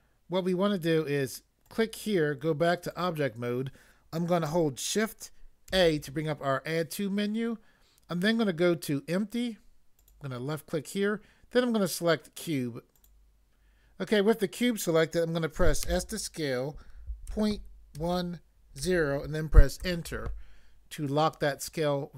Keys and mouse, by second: 1.6 click, 2.8 click, 3.0 click, 5.7 a, 10.0 click, 13.0 click, 15.8 s, 18.0 1, 18.8 0, 19.8 Return.